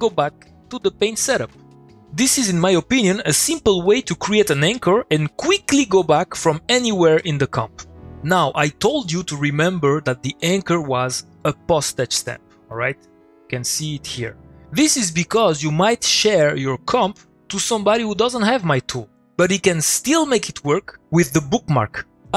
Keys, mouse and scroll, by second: 11.4 click, 12.1 Return, 14.3-15.0 click.